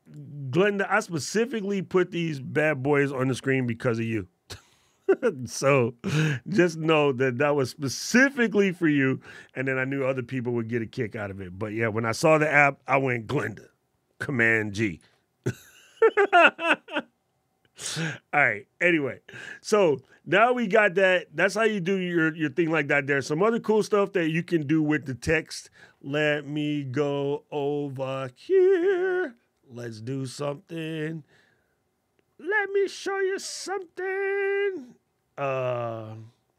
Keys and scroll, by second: 3.3 super+g, 14.7 super+g.